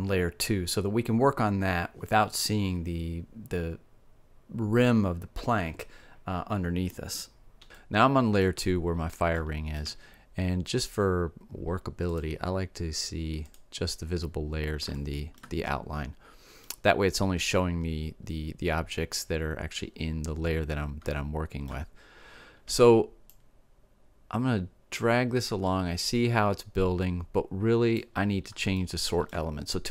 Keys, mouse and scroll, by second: 4.0 m, 10.4 1, 12.1 2, 13.0 1, 13.3 2, 16.3 middle click, 16.6-17.6 middle drag, 21.1-22.9 middle drag, 23.3-24.8 drag, 28.8-29.9 middle drag.